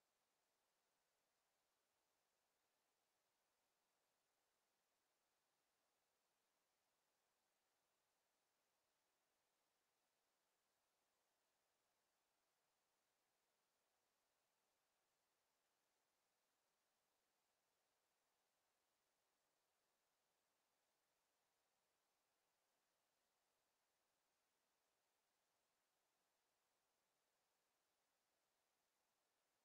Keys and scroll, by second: 21.3 ctrl+z, 23.8 ctrl+z, 28.7 ctrl+z.